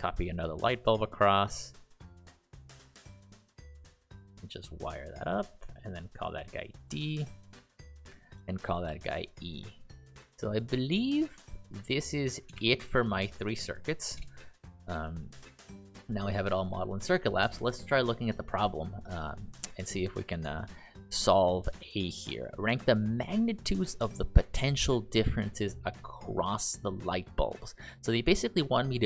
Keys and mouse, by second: 6.3 shift+d, 6.8 click, 8.8 shift+e, 9.4 click, 12.5 BackSpace, 12.9 Return, 14.1 BackSpace, 15.3 click, 20.6 ctrl+click, 27.9 click.